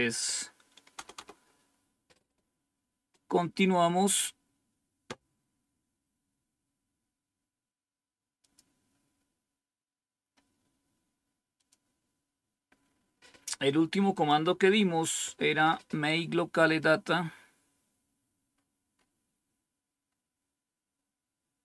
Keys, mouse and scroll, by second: 0.2 click, 0.9 Return, 1.1 Return, 8.3 click, 11.5 click, 14.0 click, 15.0 Up, 16.4-18.5 scroll down 3, 18.5-19.0 scroll up 2, 19.6-20.7 scroll up 1, 21.0-21.6 scroll down 2.